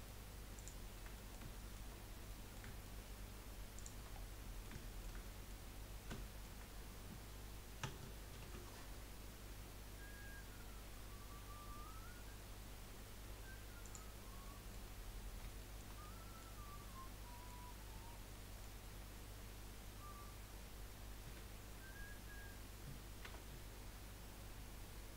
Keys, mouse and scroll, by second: 0.5 shift+click, 1.1 middle click, 1.9-2.3 scroll up 1, 2.3-3.7 middle drag, 3.7 shift+click, 4.1 scroll down 3, 4.5-5.6 shift+middle drag, 5.6-6.0 scroll up 2, 6.2 shift+middle click, 6.4-6.9 shift+scroll up 1, 8.3 ctrl+b, 14.5 middle click, 15.0-15.6 scroll down 2, 15.6-21.2 shift+middle drag, 21.2 a, 23.2 u.